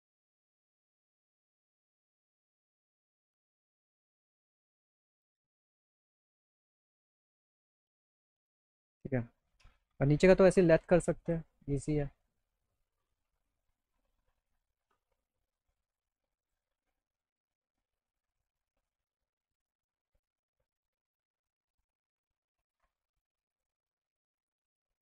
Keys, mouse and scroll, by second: 0.3 click, 1.7 click, 2.1 click, 2.8 click, 4.4-5.6 drag, 6.3 click, 6.7 click, 7.4 alt+middle click, 8.4 middle click, 9.7 middle click, 11.3 click, 13.4 z, 16.5 click, 17.4 middle click, 17.7 middle click, 20.0 click, 21.1 click, 23.6 click.